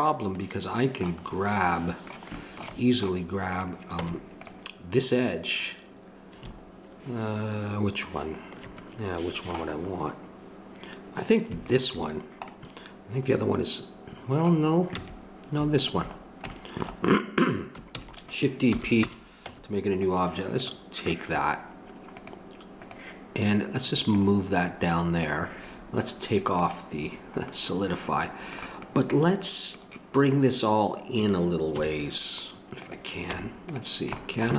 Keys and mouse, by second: 3.5 right click, 4.0 Tab, 11.6-15.0 drag, 15.0 a, 15.7-17.4 drag, 18.0 shift+d, 18.7 p, 19.4 Tab, 26.5-31.7 drag, 31.7 KP_3, 32.8 click, 33.3 Tab, 34.4 click.